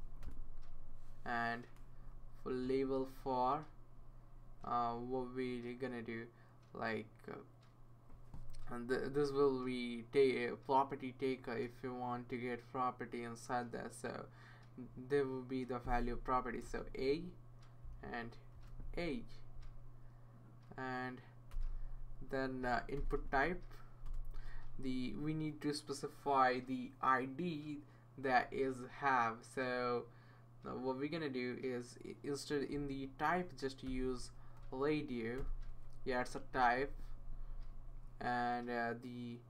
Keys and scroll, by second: 0.2 Return, 0.2 typing, 2.6 Right, 3.3 Left, 3.6 Left, 4.6 Right, 16.6 a, 18.5 a, 21.5 Return, 22.7-23.7 typing, 24.0 Return, 33.6-35.0 typing, 35.4 Return, 36.2 Tab, 36.5 Tab, 36.7 Right, 36.9 Tab.